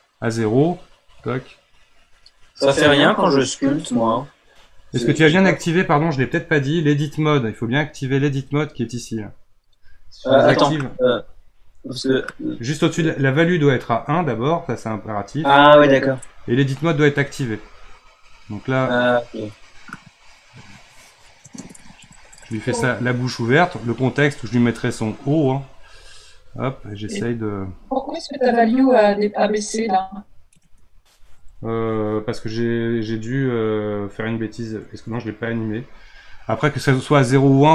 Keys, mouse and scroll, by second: 10.8 click, 14.0 click, 18.1-21.1 drag, 25.3 click, 34.7 click.